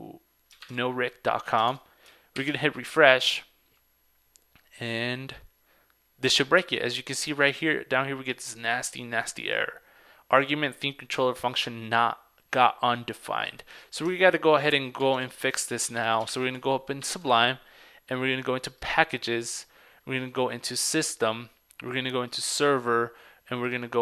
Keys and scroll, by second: 0.7 super+Tab, 1.7 super+Tab, 2.5 super+r, 15.1 super+Tab, 16.1 super+Tab.